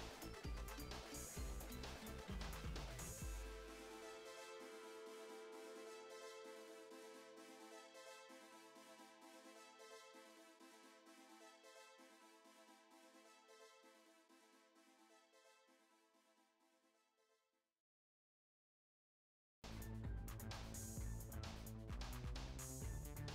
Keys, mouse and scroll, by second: 0.8 shift+middle click, 1.3 click, 1.7 ctrl+shift+b, 3.0 shift+middle click, 3.4 click, 3.8 ctrl+shift+b, 5.2 click, 5.4 shift+middle click, 5.8 ctrl+shift+b, 7.2 click, 7.6 ctrl+shift+b, 8.4 shift+middle click, 8.8 click, 9.3 ctrl+shift+b, 10.4 shift+middle click, 11.1 click, 11.8 ctrl+shift+b, 12.7 click, 13.3 ctrl+shift+b, 15.6 click, 16.2-16.6 scroll up 1, 16.6 shift+middle click, 16.9 KP_0, 17.1 KP_Decimal, 17.6-18.2 scroll up 14, 18.2 click, 18.5-19.1 scroll down 16, 19.1 click, 19.7 click, 20.4 alt+z, 20.7 click, 21.2 m, 21.8 scroll down 1, 22.0 shift+middle click, 22.4 click, 23.1 ctrl+shift+b.